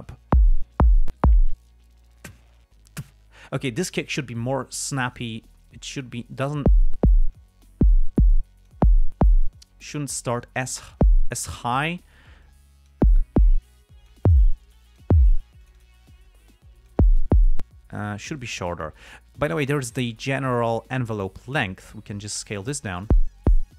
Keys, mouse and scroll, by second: 5.1 click, 6.2 click, 7.7 click, 8.8 click, 9.9 click, 12.8 click, 14.1 click, 15.1 click, 16.0 click, 16.4-17.4 drag, 21.5 click.